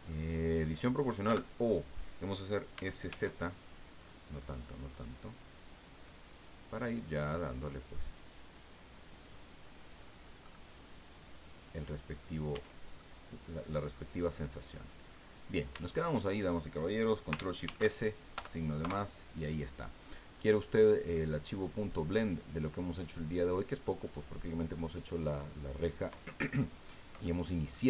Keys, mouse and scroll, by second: 0.1 click, 1.2 o, 2.7 s, 3.1 z, 4.0-6.0 scroll up 4, 6.0-9.9 scroll up 1, 9.9 click, 10.4-12.4 drag, 12.5 Tab, 13.0 click, 13.9-14.2 scroll down 2, 14.3 click, 15.3 scroll down 2, 15.8 shift+click, 17.6 ctrl+shift+s, 18.4 KP_Add, 18.8 KP_Enter, 20.0-20.3 scroll down 2, 20.8 scroll down 2, 21.1-24.2 middle drag, 24.8-25.4 middle drag, 25.8 scroll up 2, 27.2-27.8 middle drag.